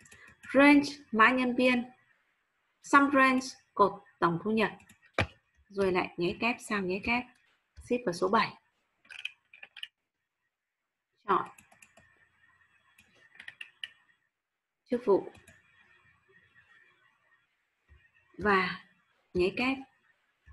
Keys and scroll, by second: 5.8 shift+', 6.3 8, 7.1 ', 7.7 shift+7, 18.4 shift+7.